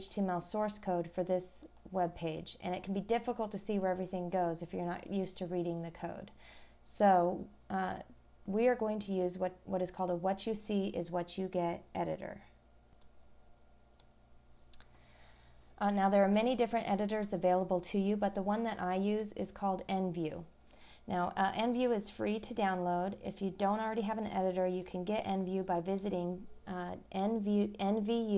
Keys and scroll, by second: 1.6 scroll down 1, 3.7-4.2 scroll down 1, 5.4-5.8 scroll down 1.